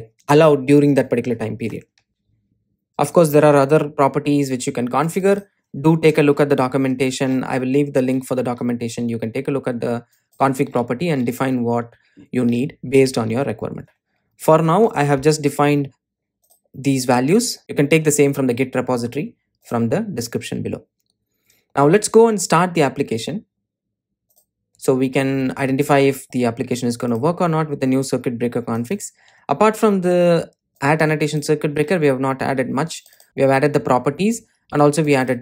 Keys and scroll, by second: 24.9 ctrl+r.